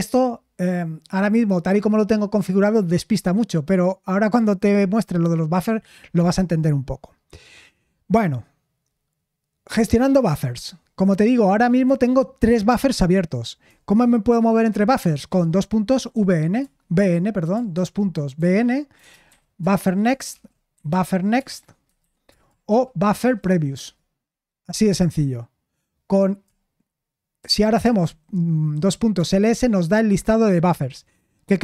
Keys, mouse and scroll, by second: 15.5-16.6 typing, 16.6 Return, 18.0-23.9 typing, 27.4-28.5 typing.